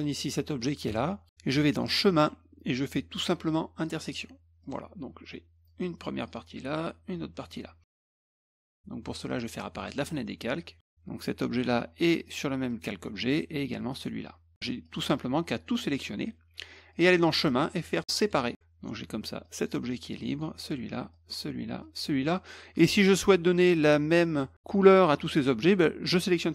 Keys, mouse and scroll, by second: 4.0 click, 4.6 click, 5.7-6.2 drag, 6.8-7.4 drag, 8.1 ctrl+z, 8.5 ctrl+z, 9.3 click, 9.8 click, 12.2 click, 12.7 click, 13.9 click, 14.8 click, 15.1 click, 16.9 click, 18.2 click, 19.4 drag, 20.1 drag, 21.1 drag, 21.8 drag, 25.6 click.